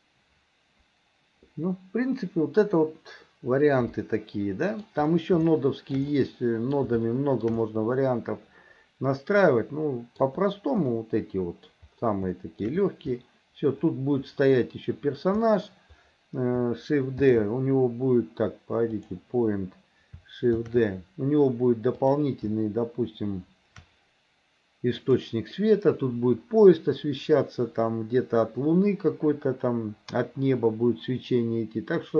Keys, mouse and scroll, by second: 4.0 middle click, 5.5 shift+middle click, 6.2 middle click, 7.0 shift+middle click, 7.7-10.3 middle drag, 10.9 middle click, 12.4 shift+middle click, 19.0 click, 25.1-32.1 drag.